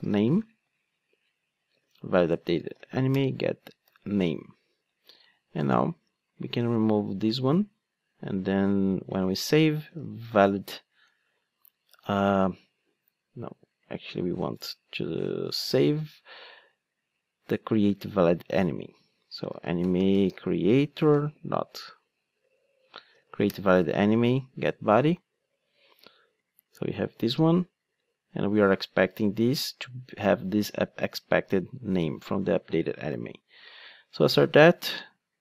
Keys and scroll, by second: 6.9 super+x, 11.1 Return, 21.0 Return.